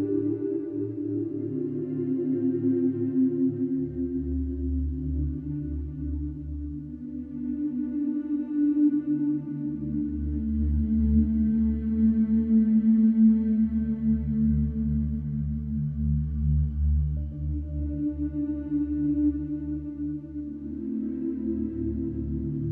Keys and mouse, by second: 0.5 s, 0.7 y, 2.1-3.6 drag, 4.8 e, 9.9 shift+middle click, 10.8 shift+d, 11.1 Escape, 14.0 Tab, 15.4 Tab, 15.7 a, 16.2 e, 18.6 Tab, 20.3-21.3 typing, 21.4 Return.